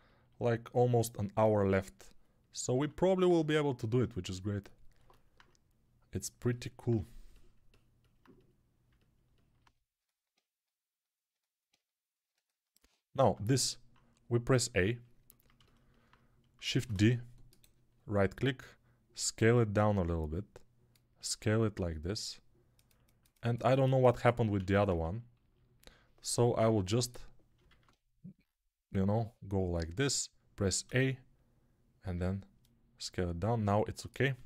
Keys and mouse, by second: 2.7 alt+q, 4.9 alt+middle click, 5.6-22.8 drag, 13.1 Tab, 14.3 a, 16.6 shift+d, 21.1 s, 22.8-33.7 alt+middle drag, 24.5 ctrl+z, 26.4 p, 27.6 alt+q, 30.7 a, 33.7-34.4 drag, 34.2 s.